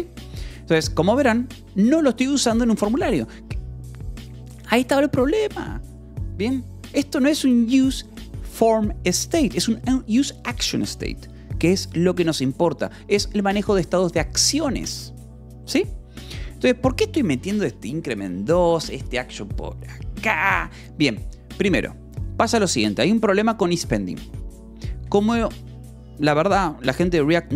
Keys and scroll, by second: 1.0 Escape, 16.6-18.2 typing, 18.0 Escape, 19.2 Escape, 19.5 k, 22.8 j, 23.1 l, 24.0 v, 24.5 e, 25.0 Escape.